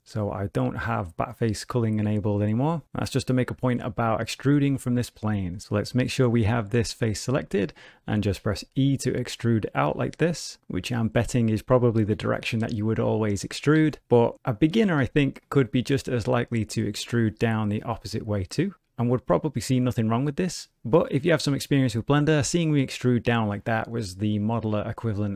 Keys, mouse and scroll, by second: 5.6 click, 6.7 middle click, 8.3 e, 9.9 middle click, 11.7 shift+middle click, 12.6 middle click, 13.1 shift+middle click, 13.7 ctrl+z, 15.1 shift+middle click, 15.6 middle click, 17.1 e.